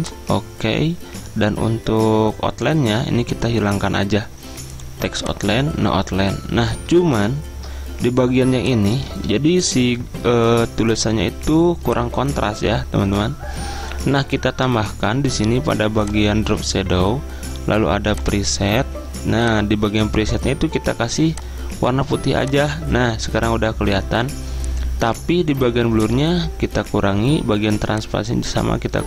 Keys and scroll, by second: 9.2 ctrl+a, 9.6 ctrl+], 9.8 ctrl+], 10.0 ctrl+].